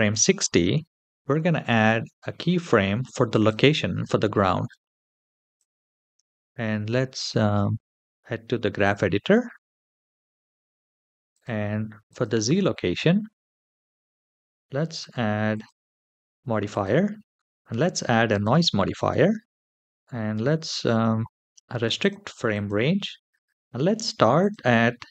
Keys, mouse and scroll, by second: 1.6 i, 4.2 middle click, 4.6-5.4 scroll down 3, 5.4 click, 6.3 n, 7.2-8.8 drag, 11.1 click, 11.9 click, 14.8 click, 15.3 click, 16.5-18.3 drag, 19.8-21.8 scroll down 2, 21.8 click, 21.8 scroll down 1, 22.3 click, 22.8-24.2 scroll down 4, 24.2-25.1 drag.